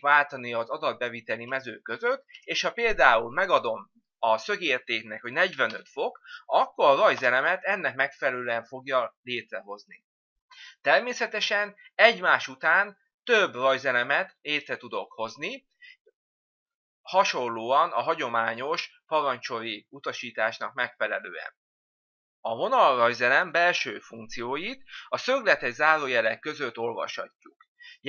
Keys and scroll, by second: 0.6 Tab, 7.2 Return, 8.0 Return.